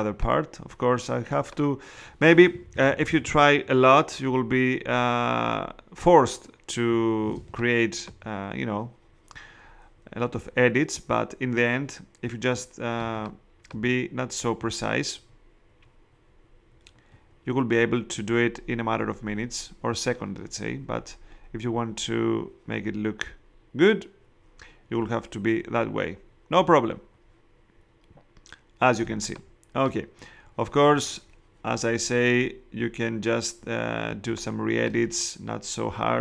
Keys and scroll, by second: 2.6 ], 7.3 space, 12.9 space, 29.0 space, 34.1 space.